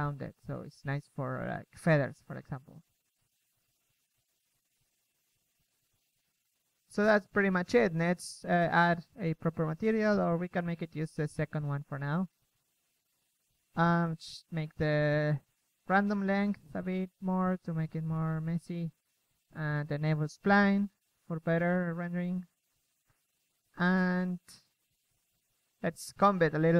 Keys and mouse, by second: 0.2 KP_3, 3.3 KP_1, 15.7-17.6 drag, 25.6-26.4 drag, 26.4 a.